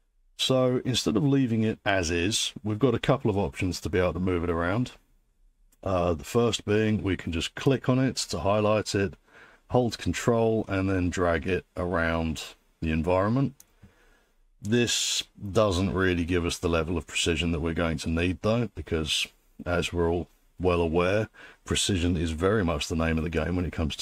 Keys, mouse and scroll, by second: 7.8 click, 13.6 ctrl+click, 19.6 scroll, 21.9-23.8 scroll.